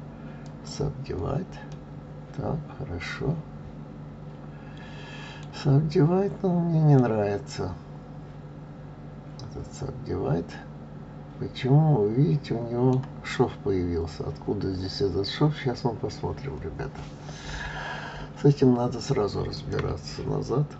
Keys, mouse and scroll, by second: 1.7-4.8 middle drag, 5.9 scroll up 2, 6.9-10.0 middle drag, 19.5 click.